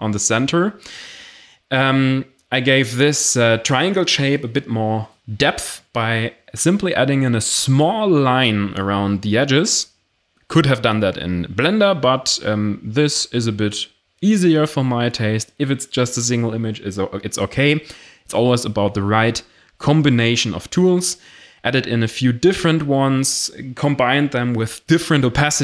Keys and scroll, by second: 6.1 d, 7.8 x, 17.8 Return, 23.4 Delete.